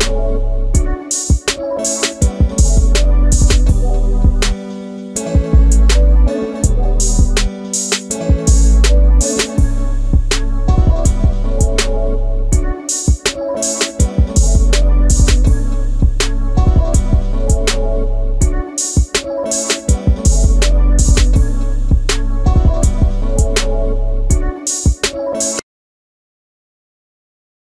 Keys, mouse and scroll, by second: 0.9 Escape, 4.5 Escape, 13.0 space, 13.0 Escape, 15.4 m, 16.4 click, 16.8 space, 17.1 space, 17.2 Escape, 17.2 space, 18.6 m, 19.8 click, 20.1 space, 20.2 Escape, 20.6 space, 20.6 Escape, 21.2 middle click, 22.3 middle click, 23.6 shift+middle click.